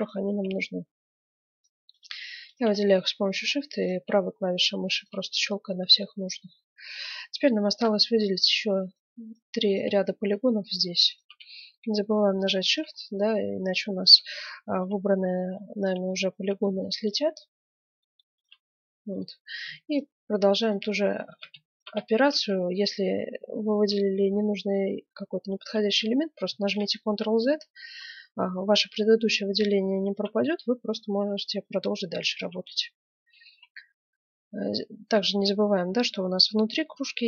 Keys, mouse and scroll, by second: 2.1 right click, 2.7-9.6 middle drag, 8.8-11.4 right drag, 10.0-14.5 middle drag, 14.5 right click, 15.0 middle click, 15.1-18.8 right drag, 17.8 middle click, 18.8-20.9 middle drag, 20.9-22.0 right drag, 21.2 ctrl+z, 22.0-23.4 middle drag, 23.4 scroll up 1, 23.7 middle click, 24.3-25.4 right drag, 26.5 ctrl+z, 29.2-30.6 right drag, 30.6-32.0 middle drag, 32.0 right click, 32.6-34.2 middle drag, 34.2 right click, 36.5 middle click.